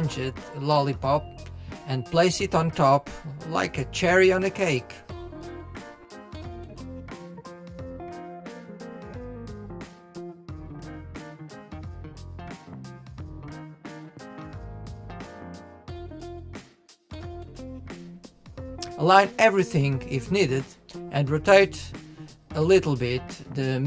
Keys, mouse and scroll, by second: 2.3-3.9 middle drag, 4.2 click, 5.0-9.9 middle drag, 11.9 click, 12.4-14.1 middle drag, 14.1 KP_1, 16.4-17.8 drag, 19.2-20.7 middle drag, 21.5 KP_1, 22.6 click.